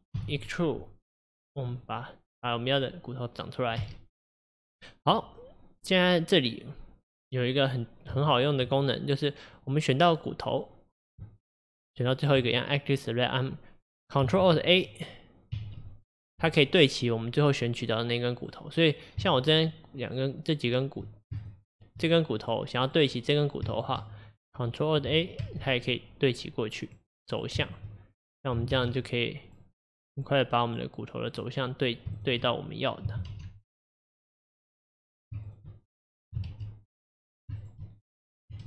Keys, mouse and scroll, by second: 0.2 e, 2.5 click, 3.9 e, 7.5 click, 8.4 shift+click, 9.6 click, 10.2 click, 10.6 click, 11.5 shift+click, 12.1 shift+click, 15.6 ctrl+alt+a, 18.4 click, 19.5 shift+click, 20.1 shift+click, 21.4 shift+click, 22.5 click, 22.9 click, 23.8 shift+click, 25.5 ctrl+alt+a, 26.9 click, 27.4 click, 27.7 shift+click, 28.8 ctrl+alt+a, 29.5 click, 29.7 click, 30.2 click, 30.7 click, 31.3 click, 31.7 click, 32.2 shift+click, 33.4 ctrl+alt+a, 34.2 click, 34.7 click, 35.5 shift+click, 36.5 ctrl+alt+a, 37.2 click, 37.6 shift+click.